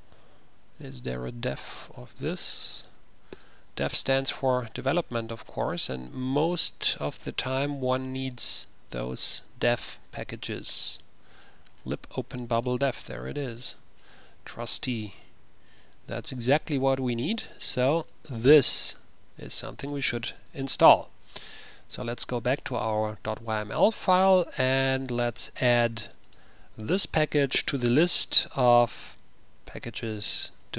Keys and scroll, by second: 2.8-3.6 typing, 20.7 typing, 20.8 ctrl+c, 27.7 ctrl+v.